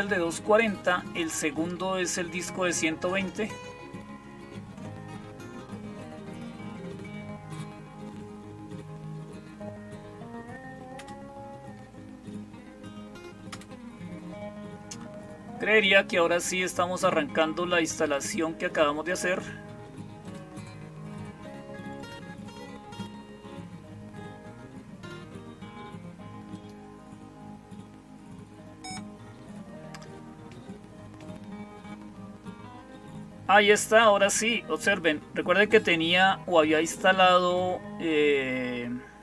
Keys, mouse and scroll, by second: 17.8 click, 18.9 click, 20.0-21.0 drag, 26.4 click.